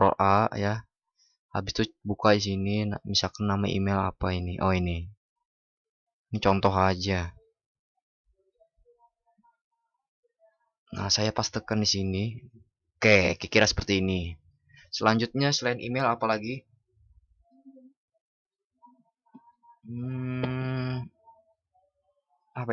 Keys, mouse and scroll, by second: 8.6 ctrl+shift+b.